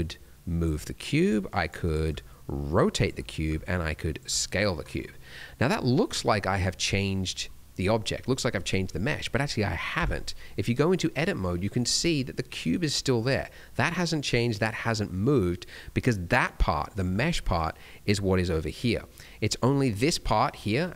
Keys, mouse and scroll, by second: 1.1 click, 2.0 click, 3.4 click, 5.0 middle click, 9.9 Tab, 10.7 middle click, 11.4 scroll up 1, 11.7 middle click, 12.8 middle click, 14.1 middle click, 15.4 middle click, 15.8-16.5 scroll up 2, 16.2 middle click, 17.0 Tab, 17.4 d, 17.5 click, 19.0 middle click, 19.4 click, 20.6 middle click.